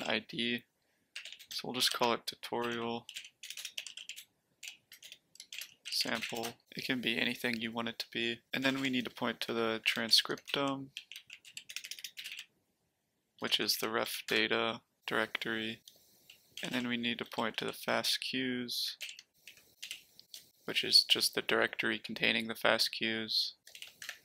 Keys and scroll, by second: 0.0-6.7 typing, 8.6-14.7 typing, 16.5-20.2 typing, 19.0 ctrl+l, 23.7-24.2 typing, 24.0 Tab.